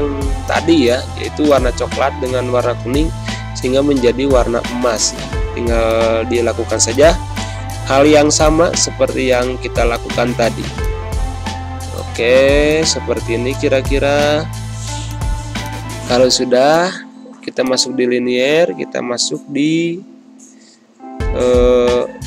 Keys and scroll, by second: 20.3 f.